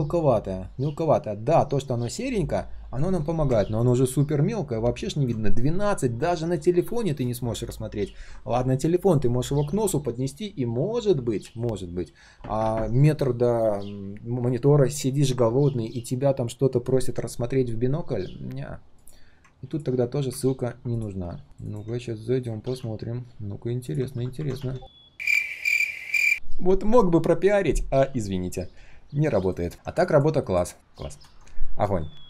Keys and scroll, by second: 20.6 ctrl+u, 22.6 ctrl+c.